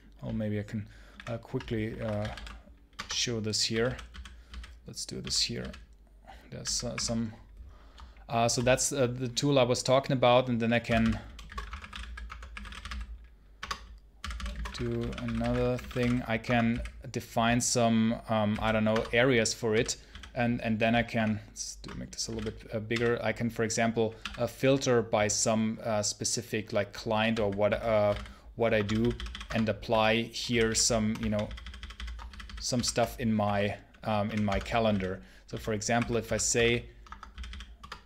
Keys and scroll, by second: 1.0-5.4 typing, 2.8 Return, 6.5 r, 6.8 t, 10.7-16.5 typing, 13.4 Return, 18.4 b, 18.8 Return, 19.6 j, 19.9 k, 21.0 ctrl+shift+=, 21.8-22.8 typing, 24.0 i, 26.9-28.7 typing, 28.6 Escape, 29.3 Return, 29.7 r, 30.3 shift+k, 31.1 alt+k, 31.3 alt+k, 32.1-38.0 typing, 37.6 Return.